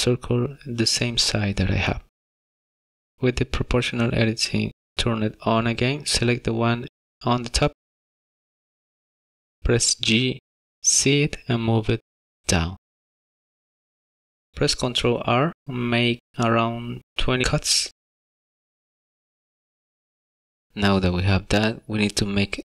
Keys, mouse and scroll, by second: 9.6 z.